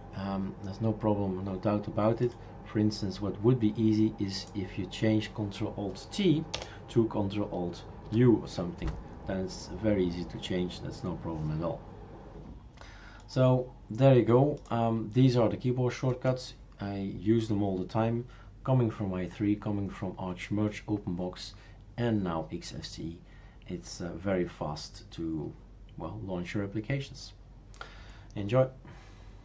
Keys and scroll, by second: 6.5 BackSpace, 8.1 u.